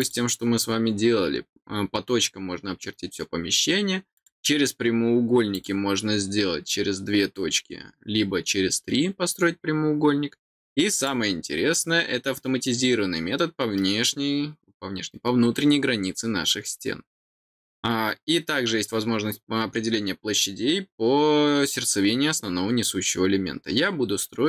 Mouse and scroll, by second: 0.0 click, 4.1 click, 5.5 click, 10.9 click.